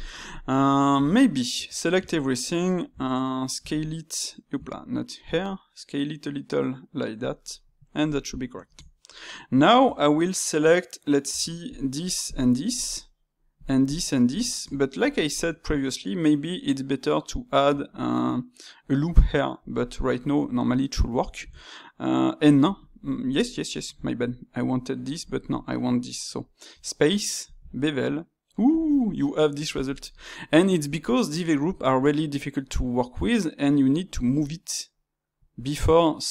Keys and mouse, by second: 0.1-0.9 ctrl+middle drag, 0.9 Tab, 2.4-3.5 middle drag, 3.5 s, 4.8 middle click, 5.2 s, 7.4-9.8 middle drag, 9.8 Tab, 11.2 Tab, 11.6 click, 12.2-13.6 shift+drag, 13.8 shift+click, 14.4-18.3 ctrl+shift+middle drag, 23.6-26.6 shift+middle drag, 26.6 space.